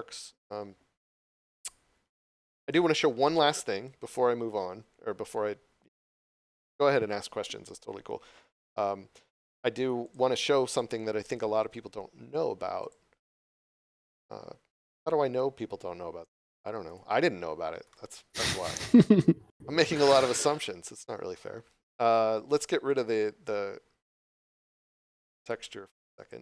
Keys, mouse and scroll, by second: 10.0 click, 14.1 click, 16.9 click, 17.9 middle click, 21.6 scroll down 1, 22.9 click, 26.0 click.